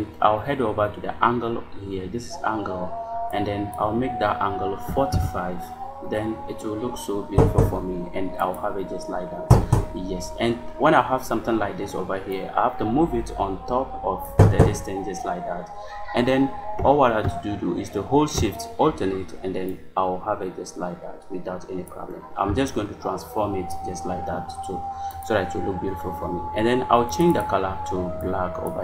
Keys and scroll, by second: 4.7 4, 5.0 5.